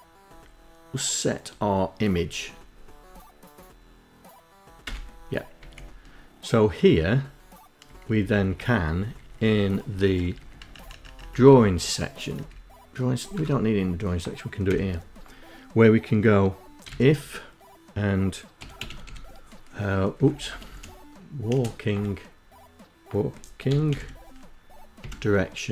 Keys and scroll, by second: 3.5 Return, 4.2 Down, 4.4 Down, 5.1 Down, 6.7 Down, 7.1 Down, 7.4 Down, 7.5 Down, 7.7 Down, 8.0 Down, 8.5 Up, 8.9 Down, 9.3 Up, 9.5 Up, 9.7 Up, 10.2 Up, 10.3 Up, 11.0 Up, 13.3 Tab, 15.2-18.2 typing, 18.7 Left, 19.1 Left, 19.3 Left, 20.1 space, 20.6 End, 22.1-23.1 typing, 23.6 Tab, 25.0 space, 25.2 =, 25.3 space.